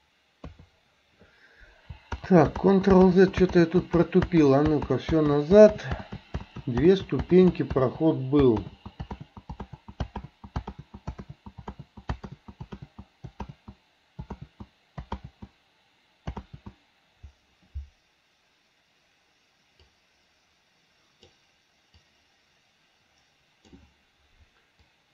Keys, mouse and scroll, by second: 0.5 KP_3, 2.3 ctrl+z, 2.7 ctrl+z, 3.1 ctrl+z, 3.6 ctrl+z, 4.0 ctrl+z, 4.5 ctrl+z, 4.9 ctrl+z, 5.4 ctrl+z, 5.8 ctrl+z, 6.2 ctrl+z, 6.7 ctrl+z, 7.1 ctrl+z, 8.7 ctrl+z, 9.2 ctrl+z, 9.7 ctrl+z, 10.3 ctrl+z, 11.3 ctrl+z, 11.8 ctrl+z, 12.3 ctrl+z, 12.9 ctrl+z, 13.5 ctrl+z, 14.4 ctrl+z, 15.3 ctrl+z, 20.0-21.4 drag, 22.1-23.8 drag, 24.9-25.1 drag.